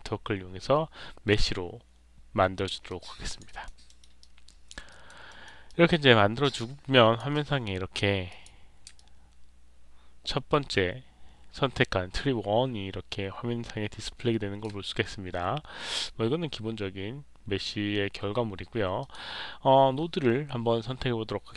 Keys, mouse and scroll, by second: 2.8 alt+click, 3.4 alt+right click, 3.8 alt+middle click, 4.1 alt+click, 4.8 alt+right click, 5.2 alt+middle click, 5.6-7.1 alt+drag, 8.2 click, 8.9-14.5 alt+drag, 15.8 click, 18.9 click.